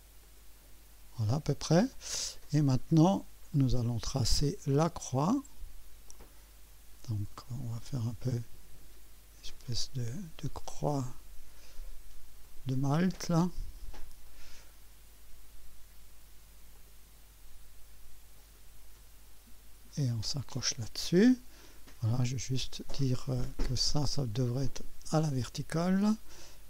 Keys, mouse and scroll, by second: 0.2 right click, 3.5 click, 6.1 click, 10.7 click, 12.4 click, 14.2 click, 16.7 click, 18.4 click, 20.3 click, 20.8 right click, 21.6 right click, 23.0 click, 25.4 click.